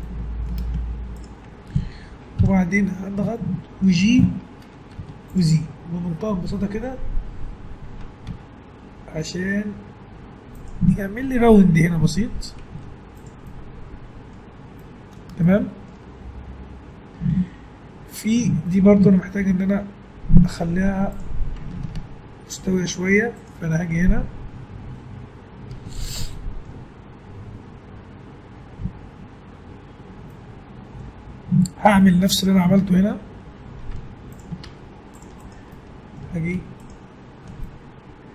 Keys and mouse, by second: 2.4 KP_1, 5.0 z, 6.5 g, 12.2 Tab, 12.7 z, 13.5-14.6 middle drag, 20.8 Tab, 22.6 ctrl+r, 24.2-25.4 middle drag, 26.3-27.3 middle drag, 33.9 Tab, 34.6 ctrl+Tab, 35.4 click.